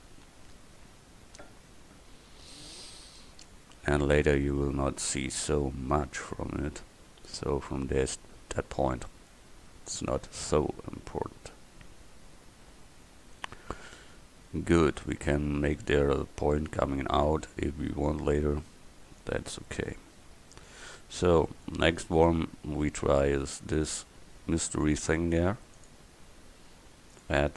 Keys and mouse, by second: 21.7 middle click.